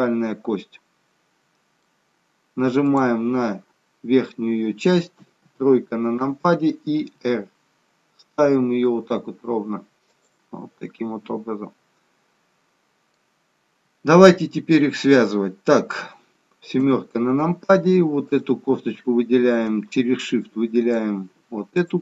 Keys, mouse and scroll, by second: 2.8 click, 5.1 KP_3, 7.1 r, 10.5 middle click, 14.3 middle click, 16.8 KP_7, 18.2 click, 20.6 shift+click.